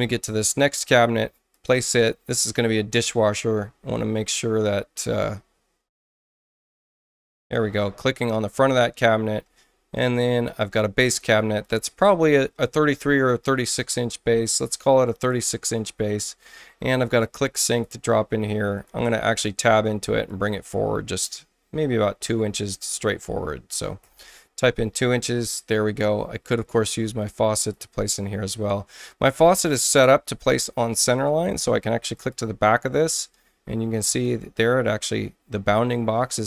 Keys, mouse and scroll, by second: 1.5 ctrl+click, 2.8 ctrl+click, 6.1 ctrl+click, 6.9 ctrl+click, 11.0 ctrl+click, 11.6 ctrl+click, 12.6-15.3 ctrl+drag, 16.9 ctrl+click, 17.6 ctrl+click, 18.2 ctrl+space, 18.7 ctrl+click, 19.3 ctrl+Return, 20.2-23.2 ctrl+drag, 22.9 ctrl+Return, 24.0 ctrl+2, 24.1 ctrl+Return, 27.5 ctrl+click, 32.1 ctrl+click, 33.0 ctrl+space, 34.0 ctrl+click.